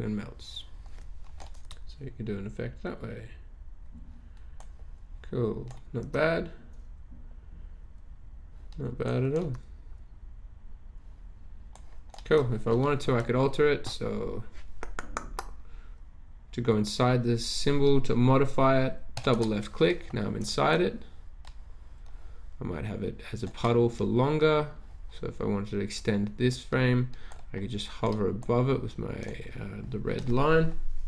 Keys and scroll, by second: 1.6 Return, 6.0 Return, 9.4 Return.